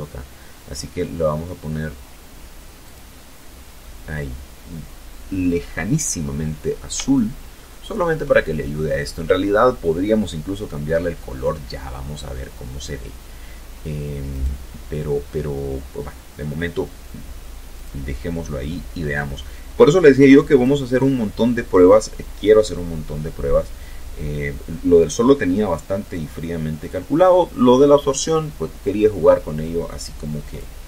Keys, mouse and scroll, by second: 0.4 click, 8.6-8.9 scroll up 2, 11.9 right click, 15.4 click, 16.0-16.9 scroll down 4, 18.1 click, 28.1 click.